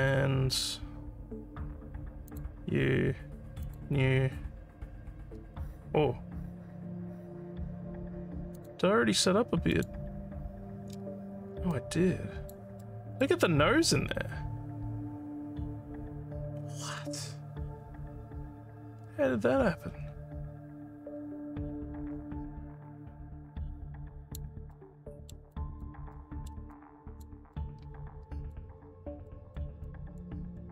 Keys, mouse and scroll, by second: 3.6 click, 8.6 click, 9.7 click, 11.7 alt+click, 12.9 alt+middle click, 13.5-24.3 alt+drag, 24.7 alt+middle click, 25.6 alt+click, 26.1 alt+middle click, 26.8 alt+click, 27.5-28.5 alt+middle drag, 29.2 alt+middle click, 29.8 alt+click, 30.6-30.7 alt+middle drag.